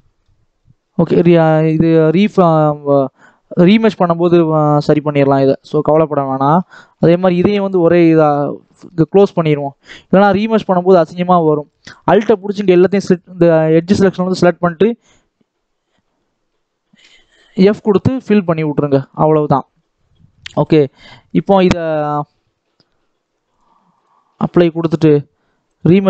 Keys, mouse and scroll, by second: 0.5-1.2 scroll down 10, 1.2 Tab, 2.0 click, 2.2 middle click, 3.1-4.0 scroll up 1, 4.0 shift+middle click, 4.7 scroll down 3, 4.9 shift+middle click, 5.3 scroll up 2, 5.5 shift+middle click, 6.0-6.5 scroll up 1, 6.5 Tab, 6.9 alt+a, 7.5 click, 8.3 scroll up 1, 8.5 shift+middle click, 9.0 scroll down 1, 9.2-10.5 shift+middle drag, 10.5 click, 11.1 alt+a, 12.5 alt+click, 17.7-18.1 scroll down 5, 18.1 middle click, 18.7 Tab, 18.9 scroll down 1, 19.1 shift+middle click, 19.7-20.2 scroll up 1, 20.2 middle click, 21.0 Tab, 21.7 Tab, 23.4-25.7 drag.